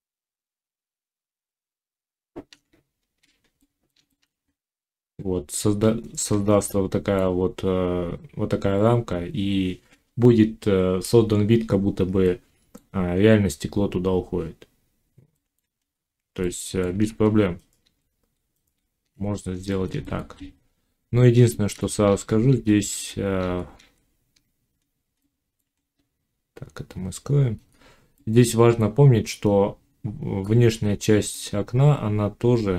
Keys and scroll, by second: 2.6 z, 4.5 Tab, 16.9 ctrl+z, 22.0 ctrl+z.